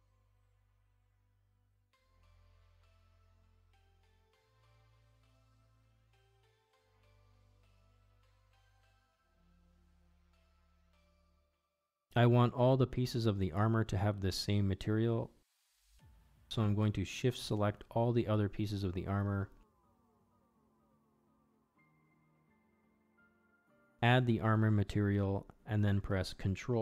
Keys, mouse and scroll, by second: 0.9 middle click, 1.9-2.9 drag, 6.2 Tab, 7.1 click, 7.7 middle click, 8.3 middle click, 9.0 shift+middle drag, 9.5 middle click, 12.0 click, 12.9 Tab, 15.4 click, 18.4 shift+middle drag, 19.2 click, 20.1-20.7 shift+drag, 20.7 middle click, 20.8 shift+click, 21.4-21.9 shift+drag, 22.6 shift+middle drag, 22.9-23.2 shift+middle drag, 23.7 ctrl+z, 23.8-24.2 middle drag, 24.7 shift+click, 25.0-25.3 middle drag, 26.2 ctrl+l.